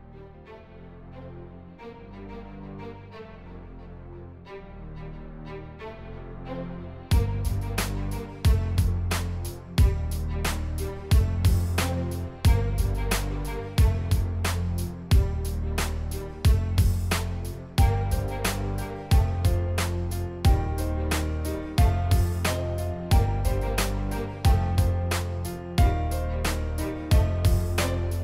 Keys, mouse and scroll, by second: 0.4 click, 1.4 click, 1.9 click, 2.5 click, 2.7 click, 3.4 shift+x, 3.6 click, 4.0 click, 4.5 click, 4.6 scroll down 1, 4.8 click, 5.2 click, 5.8 click, 6.1 click, 6.9 click, 7.2 click, 7.4 click, 7.6 click, 8.9 click, 10.4 click, 11.8 click, 13.3 click, 15.0-16.3 drag, 16.5 ctrl+z, 16.9 click, 17.1 click, 17.3 click, 17.5 click, 18.4-19.7 drag, 20.0 click, 21.1-22.1 drag, 22.9 click, 24.0 click, 24.6 click, 24.9 click, 25.1 click, 25.4 click, 26.2 click, 27.0 click, 27.1 click, 27.3 click, 27.4 click, 27.6 click.